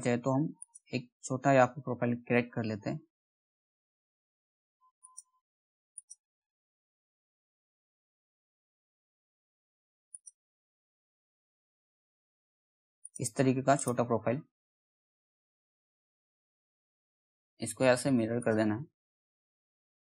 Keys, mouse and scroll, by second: 0.1 click, 2.0-2.6 shift+scroll up 1, 4.5 shift+click, 4.6 shift+click, 8.4 shift+scroll up 1, 9.6 shift+click, 13.3 right click, 17.9 click.